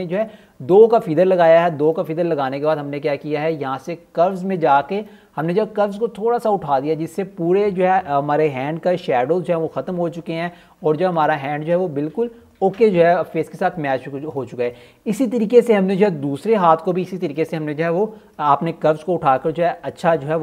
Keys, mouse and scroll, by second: 5.5 click, 11.8 scroll down 1, 12.2 alt+scroll up 1, 12.5 click, 15.4 click, 16.0 click, 17.6 click.